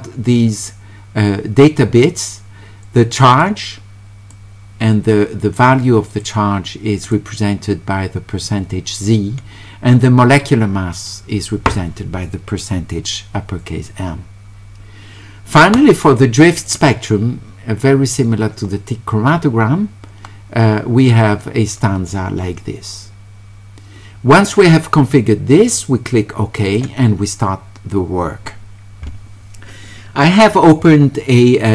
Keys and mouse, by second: 3.3 click, 4.3-6.2 drag, 7.1 click, 16.6 click, 26.7 click.